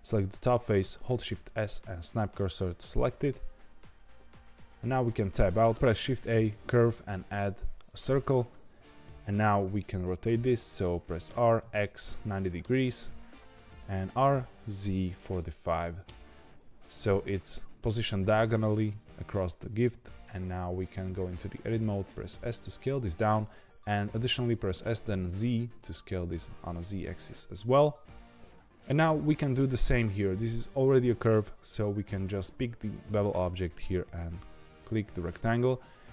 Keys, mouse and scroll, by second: 0.9 shift+s, 4.8 Tab, 5.7 shift+a, 11.2 r, 14.0 r, 21.1 Tab, 21.8 s, 24.5 s, 28.5 Tab, 32.9 click, 35.6-36.1 scroll up 1.